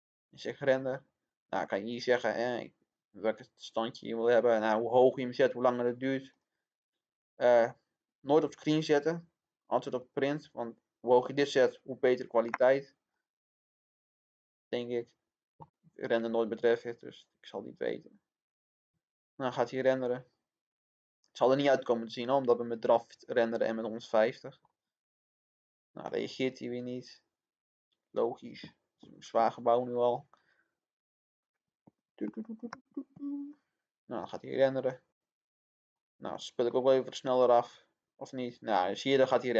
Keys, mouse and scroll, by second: 32.7 click.